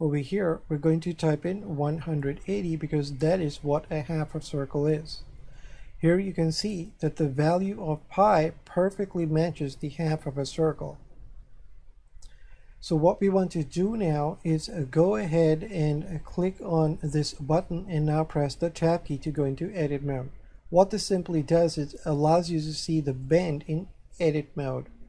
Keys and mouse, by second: 0.2 click, 1.7 KP_1, 2.0 KP_8, 2.2 KP_0, 5.6 shift+middle click, 17.2 click, 18.9 Tab, 23.2 click.